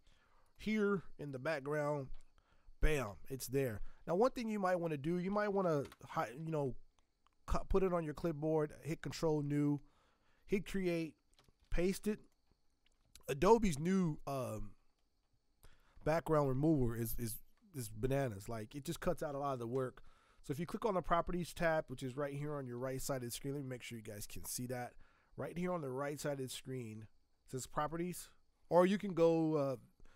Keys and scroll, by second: 1.7 ctrl+v, 4.1 ctrl+z, 5.5 ctrl+n, 5.8 Return, 11.3 ctrl+v, 23.2 alt+Tab, 23.4 alt+Tab, 23.9 alt+Tab, 24.2 alt+Tab.